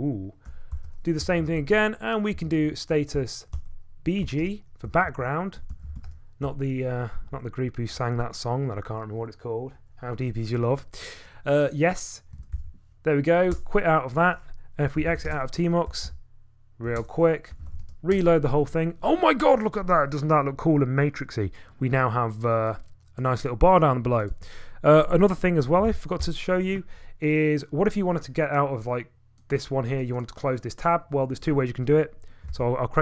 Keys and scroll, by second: 0.0-8.9 typing, 12.2-13.5 typing, 13.5 Return, 14.6-18.2 typing, 25.8 ctrl+a, 32.5 ctrl+a.